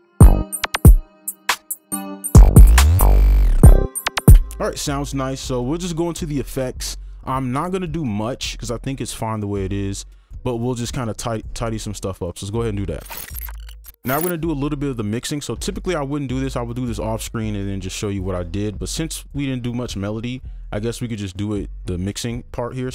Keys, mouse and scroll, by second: 4.3 space.